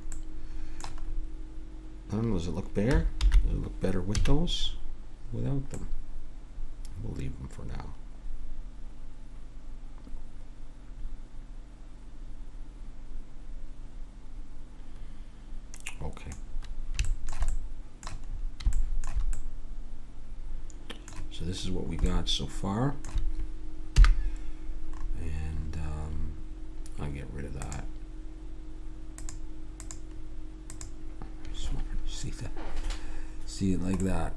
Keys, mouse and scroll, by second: 3.2 alt+h, 4.1 a, 5.3 middle click, 7.2 middle click, 14.6 typing, 16.4-20.4 middle drag, 21.7 middle click, 24.0 n, 27.6-32.5 drag, 32.7-34.3 middle drag.